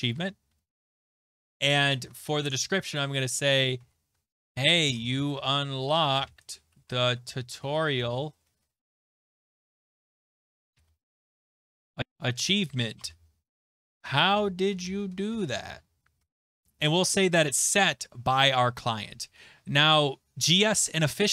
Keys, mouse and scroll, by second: 0.0-1.6 typing, 1.8 click, 2.0 ctrl+a, 3.5-8.7 typing, 10.6-16.6 typing, 17.1 click, 21.0 click.